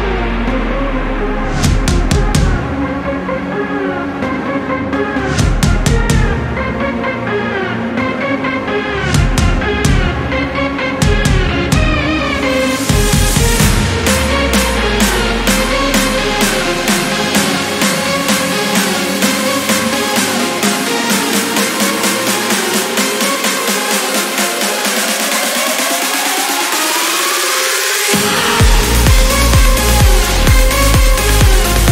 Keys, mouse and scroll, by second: 1.1 ctrl+scroll down 2, 1.5 ctrl+click, 5.0 ctrl+click, 9.0 ctrl+click, 10.4 click, 12.2-12.6 scroll up 1, 13.8 click, 14.6-15.0 scroll up 1, 15.4-16.1 scroll down 3, 17.8 0, 18.5 scroll down 2, 19.0 scroll up 2, 19.6 click, 21.4-21.7 scroll up 2, 23.8 click, 26.6 click, 28.7 ctrl+click, 30.3 ctrl+click.